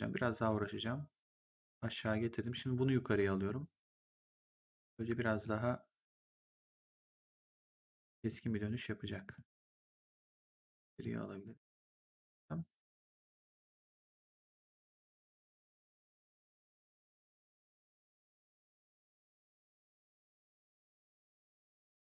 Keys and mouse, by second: 0.5 click, 2.4 click, 5.2 click, 5.2 g, 6.1 click, 9.1 click, 14.9 click, 16.1 click, 21.8 click.